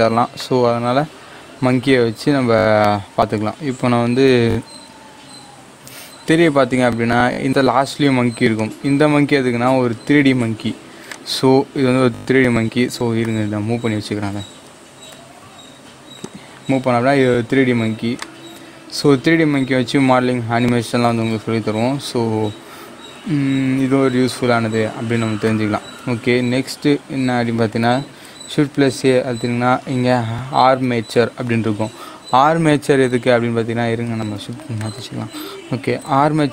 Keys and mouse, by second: 4.3 shift+a, 8.5 click, 11.0-14.2 drag, 14.2-15.0 typing, 16.3-28.1 drag, 28.1 shift+a, 34.2 shift+a, 34.8 shift+right click, 35.9 shift+a.